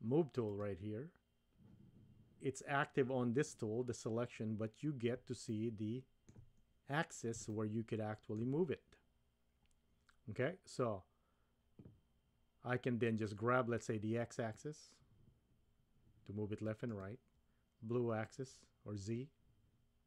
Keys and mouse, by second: 0.5 click, 5.5-6.3 shift+middle drag, 7.6-8.3 shift+middle drag, 8.3 shift+click, 8.4 middle click, 14.6-17.0 drag, 18.2-20.0 drag.